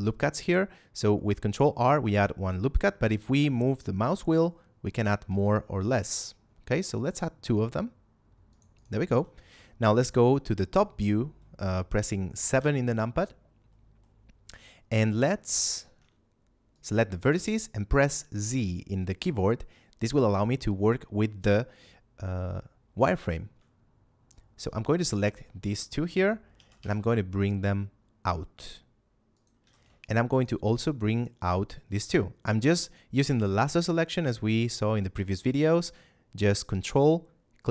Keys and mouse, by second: 8.4 click, 8.6 right click, 9.0 a, 12.5 KP_7, 13.6 middle click, 15.7 ctrl+Tab, 16.6 click, 18.4 z, 22.9 middle click, 24.2 ctrl+click, 26.5 g, 26.6 y, 29.2 click, 29.6 a, 29.9 ctrl+click, 31.0 ctrl+click, 36.8 ctrl+click.